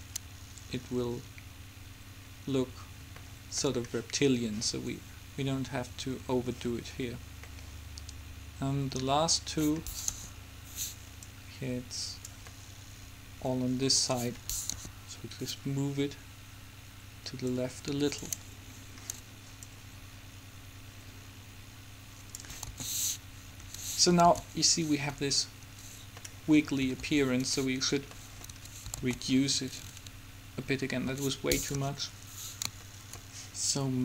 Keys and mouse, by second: 3.3-5.3 middle drag, 7.6 middle click, 9.0 middle click, 10.4 KP_7, 11.3-12.8 drag, 14.9 KP_7, 17.6-19.0 drag, 19.0-20.7 middle drag, 20.7 click, 22.8 alt+a, 23.8 Escape, 24.6 alt+a, 25.8 Escape, 27.2 alt+a, 28.6 Escape, 29.4 alt+a, 31.2 Escape, 31.8 KP_7, 33.0-34.0 drag.